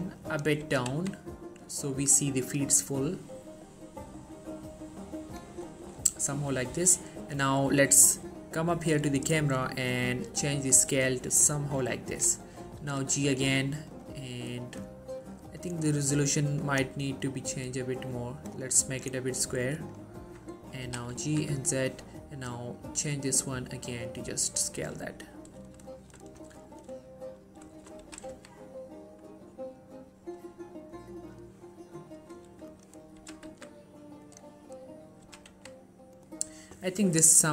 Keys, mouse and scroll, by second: 0.5 right click, 0.8 typing, 5.3 click, 5.8 shift+scroll down 1, 5.9 shift+middle click, 6.3-6.8 scroll up 1, 7.3 click, 9.8-12.6 drag, 13.0 g, 14.0-19.3 drag, 21.0 g, 21.3 z, 21.9 click, 24.9 shift+middle click, 25.1-25.7 scroll up 1, 25.8 shift+scroll down 1, 26.1 shift+middle click, 26.8 shift+middle click, 27.5 scroll down 1, 27.9 shift+middle click, 28.1 g, 28.5 x, 31.4 right click, 32.8 click, 33.3 g, 33.6 z, 34.4 click, 35.4 g, 35.6 x, 36.3 right click.